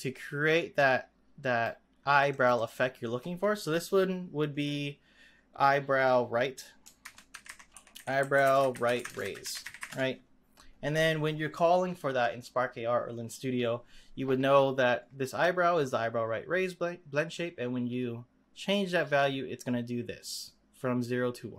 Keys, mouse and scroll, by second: 2.3 click, 2.5-5.7 drag, 17.4-20.3 drag.